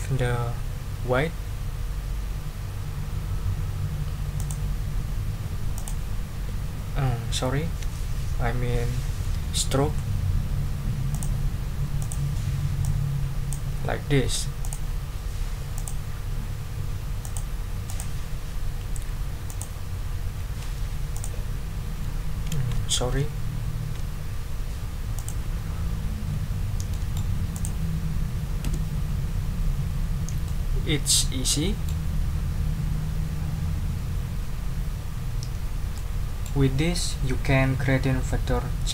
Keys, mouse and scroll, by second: 4.4 click, 5.7 click, 7.8 ctrl+z, 11.1 click, 12.0 click, 12.8-13.7 drag, 14.6 click, 15.7 click, 17.2 click, 17.9 click, 19.5 click, 21.1 shift+click, 23.6 ctrl+z, 25.1 click, 26.5 ctrl+scroll down 2, 26.9 ctrl+click, 27.3 ctrl+scroll up 1, 27.5 ctrl+click, 28.6 Delete, 29.9 ctrl+scroll down 2, 30.4-32.0 ctrl+drag, 35.9 click.